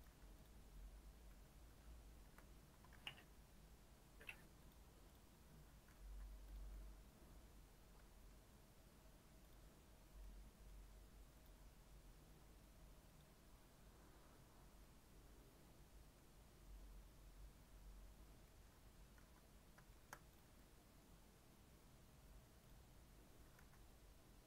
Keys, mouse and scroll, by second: 0.0 g, 1.3 KP_3, 2.2 KP_Decimal, 2.9 shift+d, 5.1 click, 5.5 scroll down 3, 6.1 z, 6.7-8.2 middle drag, 8.2 scroll up 3, 9.2 scroll up 1, 9.4 click, 10.1 scroll down 2, 10.2-11.3 middle drag, 11.3-14.8 drag, 14.8-17.9 middle drag, 17.9-18.4 scroll down 4, 18.4 middle click, 18.8-19.4 scroll up 2, 19.4 z, 19.9-22.6 shift+middle drag, 22.6-23.6 drag, 23.6 z.